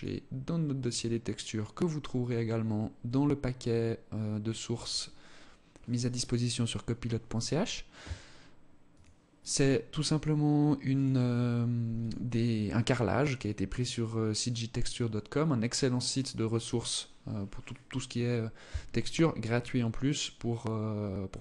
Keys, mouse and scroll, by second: 8.4 click, 10.3 click, 11.3 click, 12.6 click, 13.0 click, 15.4-17.1 scroll down 3, 17.7 scroll down 2, 19.5-21.0 scroll down 2.